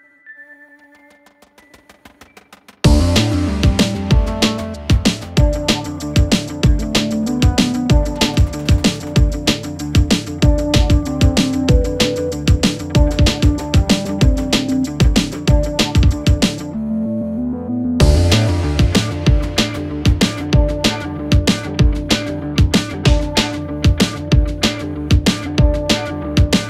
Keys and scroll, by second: 5.7 ctrl+z, 9.9 4, 12.3 9, 12.4 Return, 13.1 Delete, 14.6 1, 14.7 Return, 14.9 8, 14.9 Return, 16.2 9, 16.3 Return, 18.8 2, 20.7-23.3 typing, 20.7 Delete.